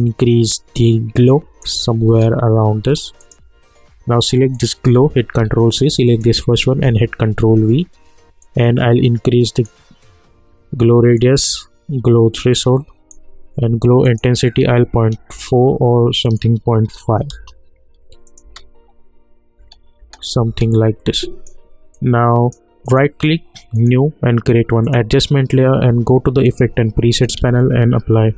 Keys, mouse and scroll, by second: 2.1 space, 3.2 click, 5.4 ctrl+c, 6.0 click, 6.8 ctrl+v, 8.4-14.0 drag, 15.3 Return, 16.2 click, 17.3 Return, 18.2 click, 18.4 space, 21.1-22.8 drag, 22.8 right click, 23.7 click, 27.1 click, 27.3 ctrl+a, 28.0-28.3 typing.